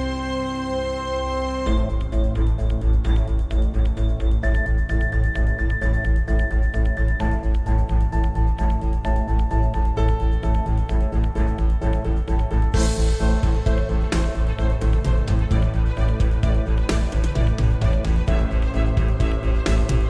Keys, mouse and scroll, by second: 0.4 click, 0.8 Tab, 1.4 click, 2.5 g, 3.4 Escape, 4.0 o, 15.2 shift+click, 15.8-17.0 scroll up 1, 17.2 Tab, 18.0 z, 18.3-20.0 middle drag, 19.1 `, 19.7-20.0 scroll up 2.